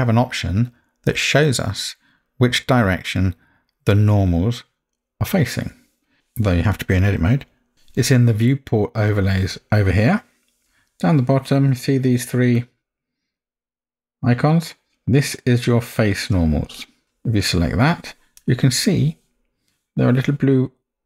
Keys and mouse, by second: 7.7 alt+a, 9.3-17.0 drag.